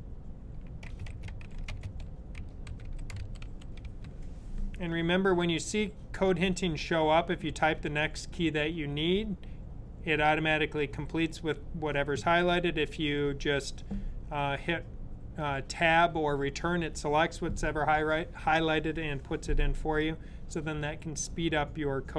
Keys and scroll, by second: 0.8-4.2 typing.